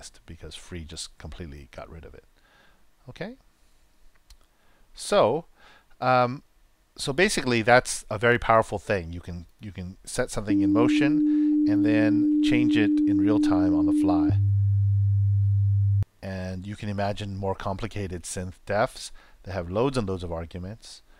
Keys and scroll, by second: 10.4 super+Return, 14.2 super+Return, 15.9 super+..